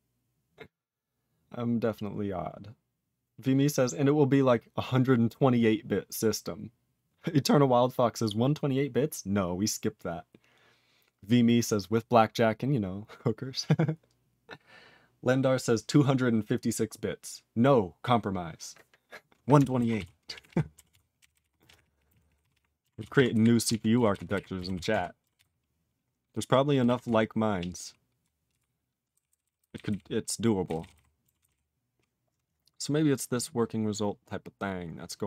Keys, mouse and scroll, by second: 19.9 ctrl+s, 20.3 ctrl+p, 20.4 ctrl+p, 20.8 ctrl+s, 21.1 ctrl+n, 21.3 ctrl+n, 21.4 ctrl+e, 21.5 ctrl+space, 21.6 ctrl+a, 21.7 ctrl+p, 21.8 ctrl+p, 21.9 ctrl+p, 22.0 ctrl+g, 22.1 ctrl+e, 22.1 ctrl+p, 22.2 ctrl+p, 22.3 ctrl+p, 22.5 ctrl+p, 22.9 ctrl+s, 23.1 ctrl+e, 23.3 ctrl+b, 23.6 ctrl+alt+f, 24.1 ctrl+s, 24.3 ctrl+alt+b, 24.7 ctrl+s, 24.9 ctrl+alt+f, 25.3 ctrl+s, 27.0 ctrl+s, 27.6-28.2 ctrl+p, 28.4 ctrl+p, 30.7 ctrl+e, 30.7 ctrl+n, 30.9 ctrl+n, 31.3 ctrl+s, 31.4 ctrl+n, 32.6 scroll down 4, 33.3 click, 33.8 click, 34.2-34.5 scroll down 3.